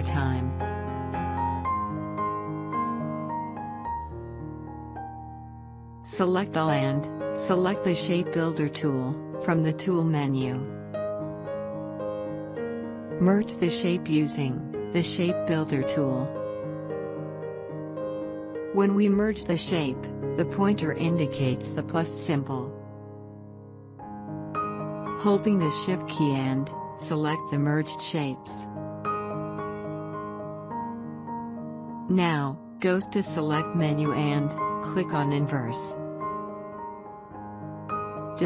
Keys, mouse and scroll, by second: 0.6 ctrl+d, 6.2-11.8 drag, 13.0 click, 16.1-22.8 drag, 25.1 click, 29.8 shift+click, 35.8 click, 38.3 click.